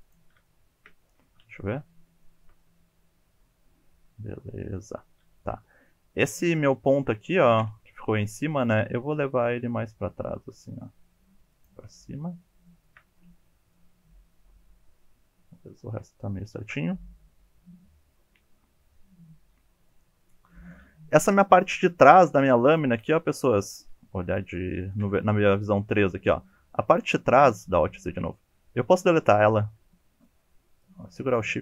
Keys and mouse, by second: 0.0 click, 0.5 shift+middle click, 1.3 alt+z, 2.3 shift+middle click, 2.6-4.9 middle drag, 5.5 1, 6.5 middle click, 7.6 KP_1, 8.5 shift+click, 9.1 g, 11.5 click, 12.1 shift+middle click, 12.7 shift+middle click, 13.8-19.9 middle drag, 20.3 middle click, 21.7 KP_1, 22.2 KP_3, 25.9 1, 26.4-27.0 drag, 27.2 shift+middle drag, 27.6 alt+z, 28.2-30.2 drag, 30.9-31.3 shift+drag.